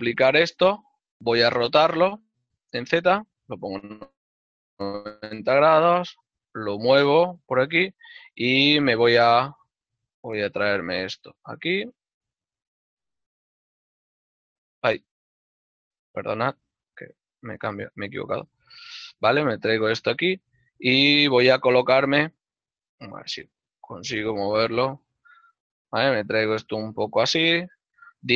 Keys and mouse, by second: 0.1 l, 1.8 r, 3.5 Return, 5.5 g, 11.4 right click, 16.3 click, 19.7 shift+middle click, 21.5 middle click, 23.4 click, 25.6 y, 27.9 click.